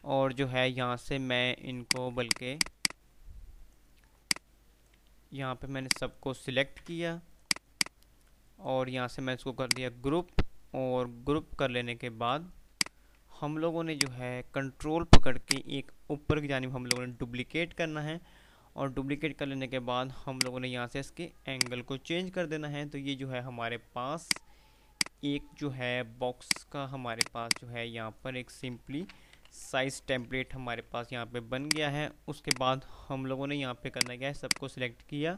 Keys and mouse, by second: 0.0-0.2 typing, 1.9-4.0 drag, 5.5 Delete, 5.9-6.3 click, 6.9 ctrl+z, 7.3-9.0 drag, 10.5 F3, 11.8 F2, 14.0-17.0 drag, 17.0-20.2 ctrl+right drag, 20.5 click, 22.3 F3, 24.6 F2, 25.3-25.9 click, 26.5-28.5 drag, 29.2 ctrl+g, 29.6 Delete, 30.2 ctrl+z, 30.2 p, 31.8 click, 32.3 F2, 32.5-33.0 click, 32.8 F2, 34.0 click.